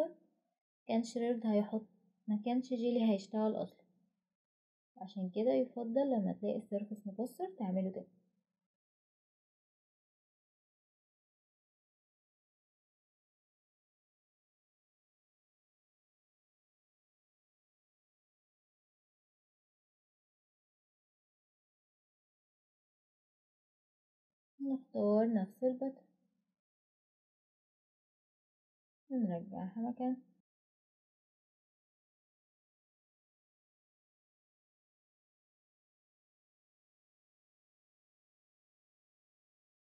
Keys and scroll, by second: 29.2 Return, 33.5 ctrl+alt+r.